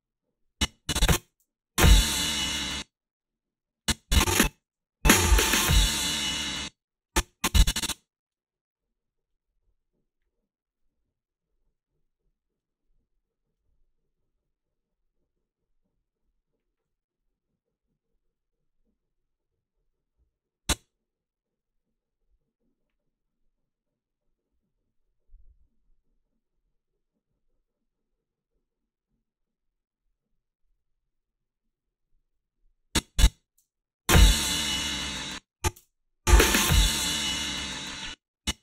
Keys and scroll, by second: 1.3 space, 2.6 space, 4.5 space, 6.4 space, 33.6 space, 35.0 space, 35.7 space, 37.9 space.